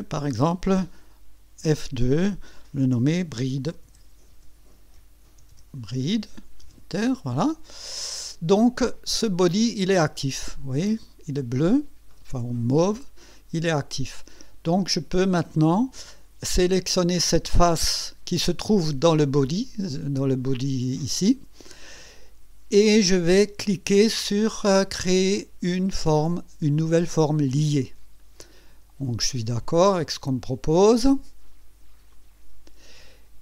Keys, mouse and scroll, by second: 1.6 F2, 3.6-6.0 typing, 6.6 Return, 9.1 click, 12.1 right click, 13.2 right click, 14.1 click, 15.3-15.6 scroll down 1, 16.1 click, 18.0 click, 27.5 click, 32.1 click.